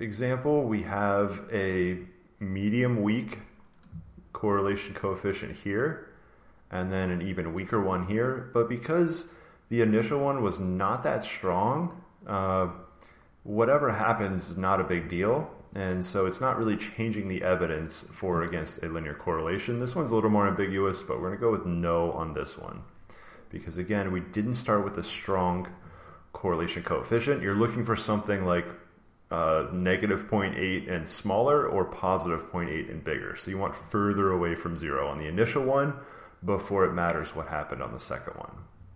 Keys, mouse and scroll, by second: 0.5 click, 3.0 click, 5.5 click, 7.0 click, 8.5 click, 8.8 click, 17.6 click, 20.8 click, 21.9 click, 23.8 click, 24.6 click, 33.9 click, 34.8 click, 37.6 click.